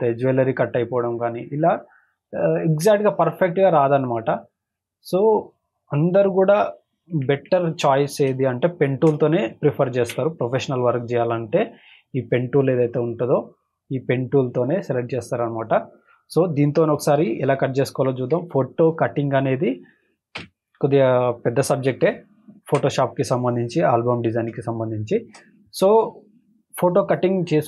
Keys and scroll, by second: 6.4 ctrl+-, 8.3 space, 8.8 space, 10.0 ctrl+d, 17.1 ctrl+=, 20.3 v, 21.3 space, 21.8 space, 24.5 space, 25.0 space.